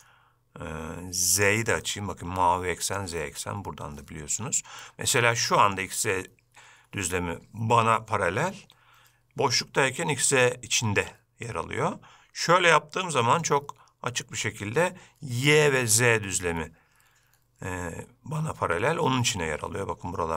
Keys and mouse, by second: 0.1-1.8 drag, 1.9-3.0 middle drag, 4.9-5.8 middle drag, 11.6-13.3 middle drag, 13.5-14.2 shift+middle drag.